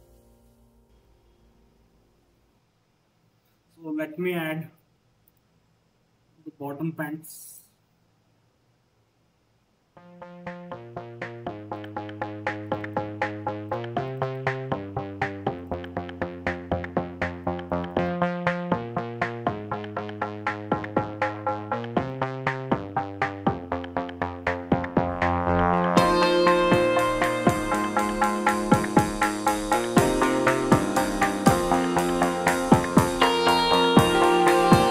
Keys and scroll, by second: 0.8 ctrl+KP_0.